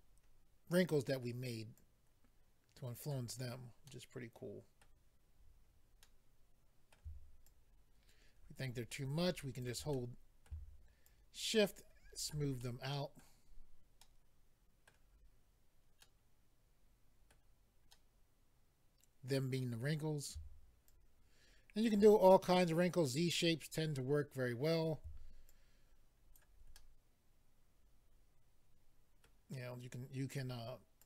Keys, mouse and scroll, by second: 1.7 click, 3.3-3.8 scroll down 2, 3.8 middle click, 6.0 middle click, 7.5 shift+click, 9.9 middle click, 11.0 shift+click, 11.0 middle click, 12.6 middle click, 13.5-14.0 scroll up 1, 14.0 middle click, 14.0 scroll up 1, 15.1 scroll down 3, 16.0 middle click, 16.0-16.4 scroll down 1, 17.9 middle click, 19.7-20.5 scroll up 2, 20.8 shift+click, 25.5 shift+click, 26.7 middle click, 30.3 click, 30.4 click, 31.0 click.